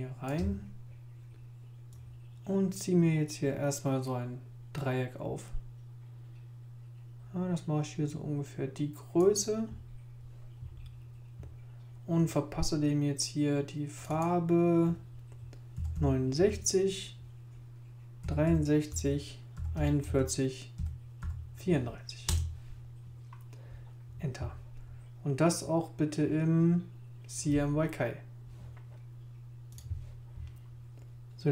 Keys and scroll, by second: 15.5-16.4 typing, 18.0-21.2 typing, 23.3 Page_Up.